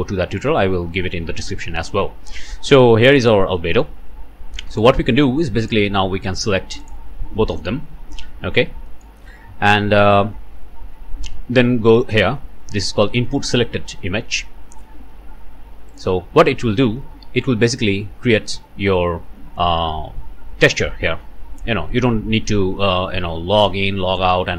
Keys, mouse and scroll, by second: 2.0-2.5 scroll up 1, 2.5 click, 3.6 click, 3.8 middle click, 5.6 click, 6.8 shift+middle click, 8.9 click, 9.0 middle click, 9.8-10.2 scroll down 1, 10.6 scroll down 1, 11.9 scroll up 1, 15.9 middle click, 23.5 middle click, 23.5 click.